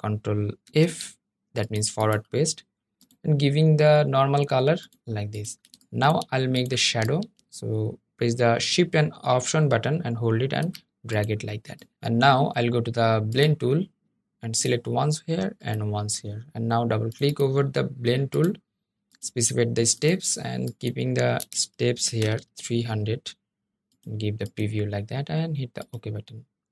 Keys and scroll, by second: 0.4 super+f.